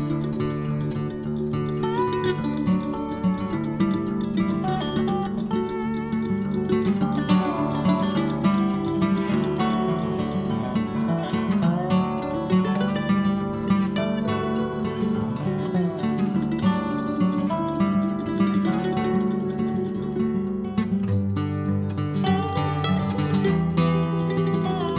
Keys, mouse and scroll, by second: 1.0-1.4 scroll down 1, 1.4 scroll up 1, 1.6-2.7 middle drag, 2.7 shift+click, 3.0 shift+click, 3.4-5.0 middle drag, 5.9 c, 13.8-14.9 middle drag, 14.9 c, 19.9 middle click, 20.7 scroll down 1, 20.9-22.4 middle drag, 23.3-23.9 scroll up 1, 23.9 c.